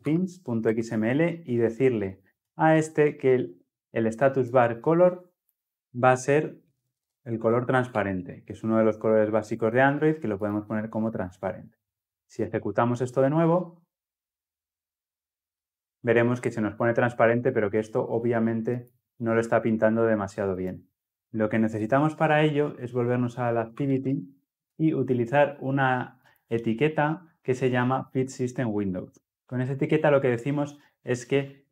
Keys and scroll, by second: 5.7 ctrl+v, 9.2 Return, 12.6 ctrl+F10.